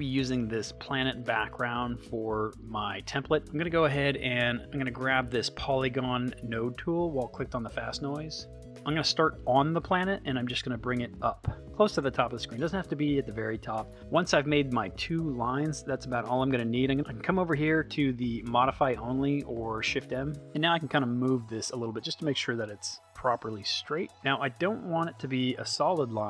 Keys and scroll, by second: 20.4 super+z.